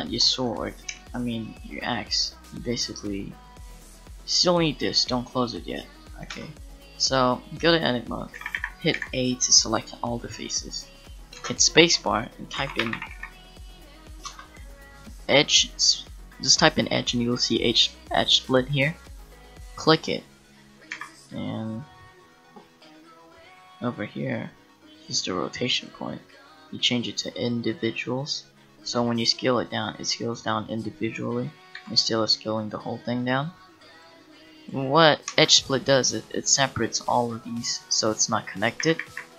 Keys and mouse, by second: 0.9 KP_Decimal, 6.0 middle click, 6.3 Tab, 8.4 a, 8.5 a, 10.7 a, 11.4 space, 20.1-21.9 middle drag, 21.9 a, 28.9 s, 31.8 s, 34.0-35.3 drag, 35.3 space, 37.4 right click, 38.8 a, 39.0 a, 39.2 w.